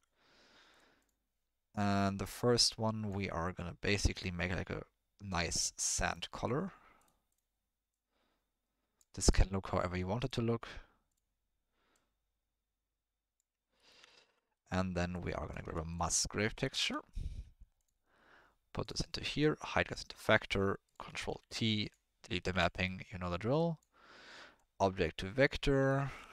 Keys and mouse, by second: 1.0 click, 14.2 ctrl+middle click, 14.4 middle click, 15.1 click, 15.4 click, 15.6 shift+a, 19.4 click, 20.4 middle click, 20.8 click, 21.2 ctrl+t, 21.8 click, 22.5 Delete, 22.7 middle click, 23.5 click, 24.5-25.6 drag, 25.9 ctrl+middle click.